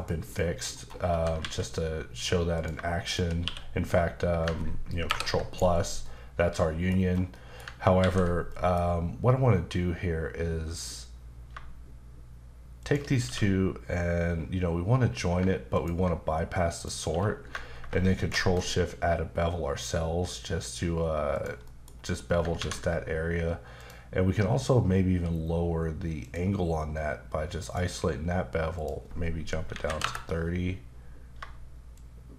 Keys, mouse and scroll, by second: 0.3 middle click, 0.7-1.1 scroll up 2, 1.1-1.4 typing, 2.5 click, 3.1 shift+click, 3.4 q, 5.1 ctrl+KP_Add, 5.5 right click, 6.1 middle click, 7.3 middle click, 8.0 ctrl+z, 8.5 middle click, 10.7 click, 12.8 shift+click, 13.2 q, 15.7 ctrl+click, 17.1 q, 18.2 ctrl+shift+click, 21.3 click, 21.6 middle click, 21.9-22.4 scroll up 1, 23.8 click, 26.2 click, 27.6 click, 28.7 click, 29.7 KP_3, 30.0 KP_Enter, 31.9 shift+click.